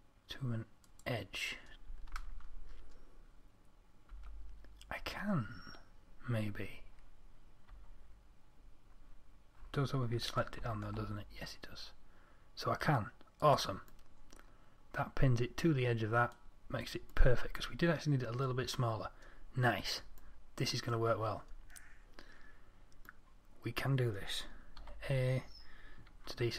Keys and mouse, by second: 4.4 g, 25.1 a, 26.4 z.